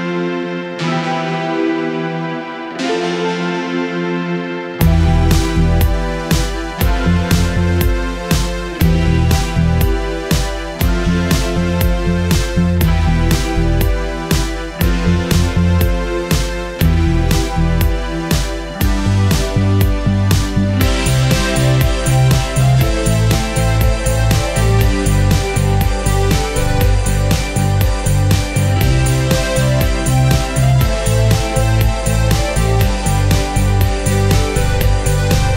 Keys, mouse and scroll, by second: 0.6 shift+Tab, 2.1 shift+click, 31.3 shift+right click, 31.5 shift+click, 31.6 shift+click, 32.9 F11, 34.1 shift+click.